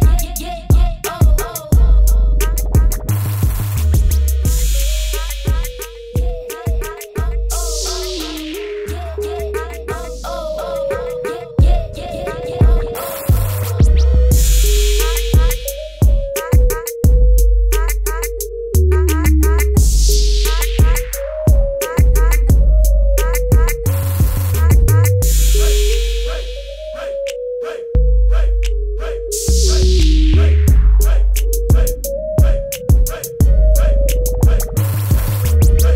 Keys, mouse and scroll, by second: 3.4 t, 3.9 click, 6.2 click, 6.8 Escape, 7.3 t, 8.6 click, 9.9 Return, 11.0 click, 12.9 v, 15.2 b, 15.6 right click, 16.8 click, 19.9 Return, 24.7 click, 26.6 right click, 28.0 Return, 28.4 typing, 29.0 click.